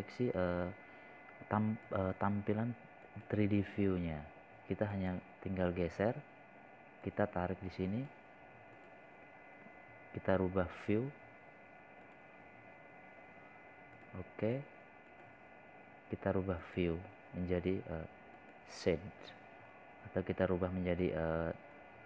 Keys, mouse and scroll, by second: 4.9 click, 9.8 click.